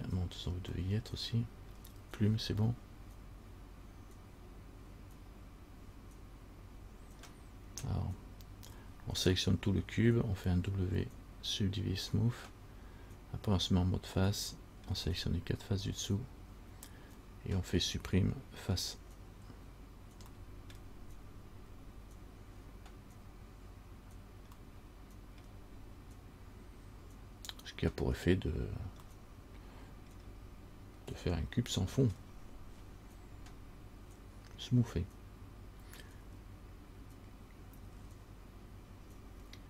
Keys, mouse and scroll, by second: 0.4-0.9 scroll down 1, 1.0 middle click, 7.6 middle click, 7.6 scroll down 1, 14.6 middle click, 15.1-17.7 scroll down 1, 20.6 middle click, 20.6 scroll up 1, 20.9 scroll down 1, 24.7 scroll up 1, 25.0 middle click, 29.3 middle click, 30.4 middle click, 32.3 scroll down 1.